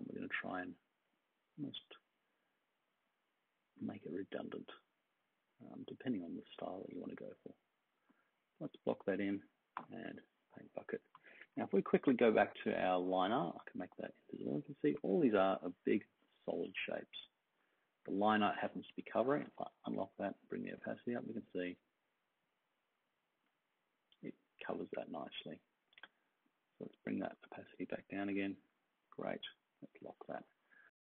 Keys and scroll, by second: 9.7 g, 11.4 super+-, 15.4 super+d, 27.9-29.0 typing, 30.3-31.1 space.